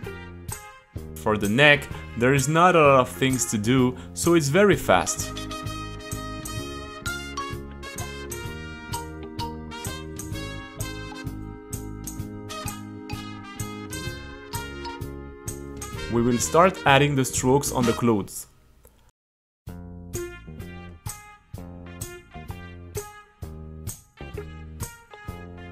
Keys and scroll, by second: 1.4-3.8 typing, 6.7 t, 7.3 c, 8.4-10.3 typing, 11.0 Return, 11.5 t, 13.0 t, 14.7-16.3 typing, 17.8 a, 18.2 c, 19.7-24.2 typing.